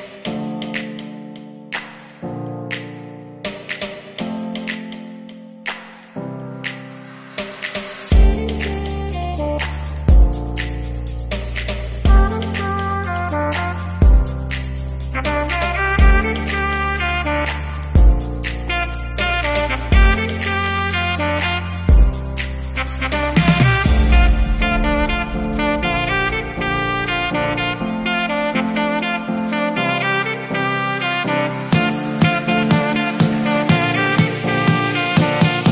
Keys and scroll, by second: 7.3 ctrl+z, 13.7 shift+m.